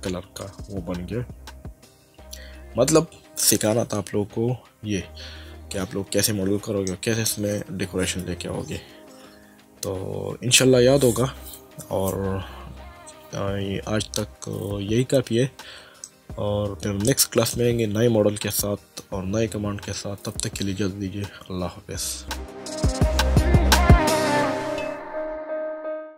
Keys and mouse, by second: 6.9 middle click, 16.1 middle click, 22.4 click.